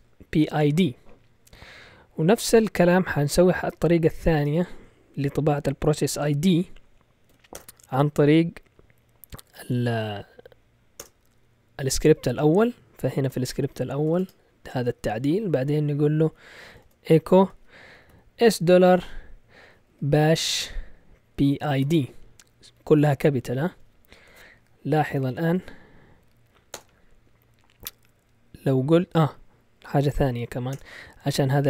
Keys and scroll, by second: 4.0 Escape, 4.3 shift+;, 7.5 Return, 8.9 Up, 9.3 Down, 10.1 Up, 10.4 Up, 11.0 Return, 11.7 Down, 12.0 Down, 13.0-14.6 typing, 14.8 Up, 16.0-18.0 typing, 19.6-25.8 typing, 26.7 Return, 30.7 Return, 31.4 Down.